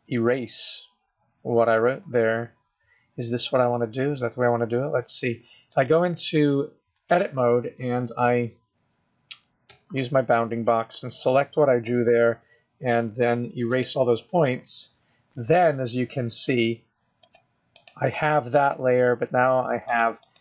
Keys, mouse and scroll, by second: 5.9 click, 9.6 click, 9.9 b, 13.2 x, 17.5 click, 18.1 click, 20.2 click.